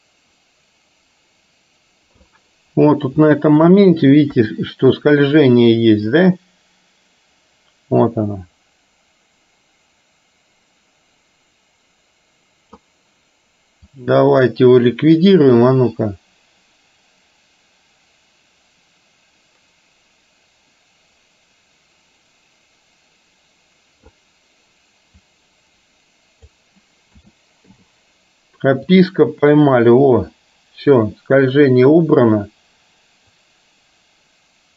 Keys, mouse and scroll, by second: 3.3-3.7 shift+middle drag, 4.4 KP_3, 6.3-12.9 drag, 13.9 click, 15.8-24.3 drag, 25.3-26.7 drag, 27.3 a, 27.8 i, 29.0-34.7 drag.